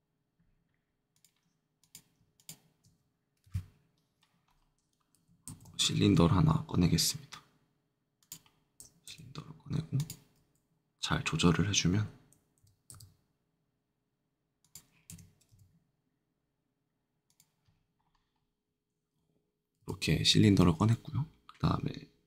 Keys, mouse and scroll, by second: 1.1 click, 1.7 click, 2.3 shift+click, 3.4 shift+Delete, 4.4-5.1 scroll up 2, 5.4 shift+a, 8.1 click, 9.1 s, 9.9 click, 12.5 s, 12.9 z, 14.6 click, 15.0 g, 15.4 z, 17.2 click, 17.8 scroll, 18.3 middle click, 18.3 scroll up 1, 19.7 a, 20.3 a.